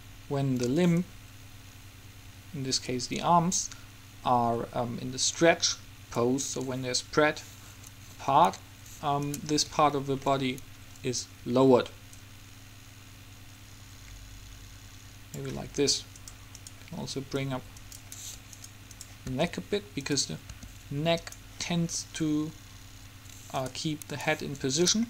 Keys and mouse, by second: 1.1-3.0 drag, 9.4-11.0 right drag, 11.0-12.3 middle drag, 12.3-14.1 drag, 16.4-17.6 right drag, 17.6-18.6 middle drag, 18.6 click, 18.7 middle click, 19.5 r, 20.7 r.